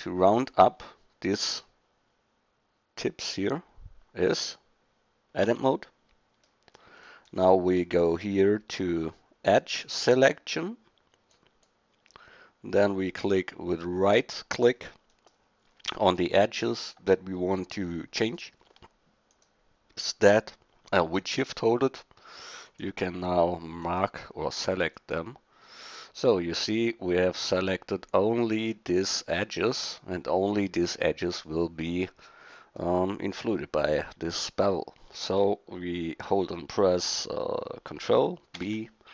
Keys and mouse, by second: 5.4 Tab, 11.3-15.8 middle drag, 26.6 middle click, 27.4 middle click, 38.6 ctrl+b.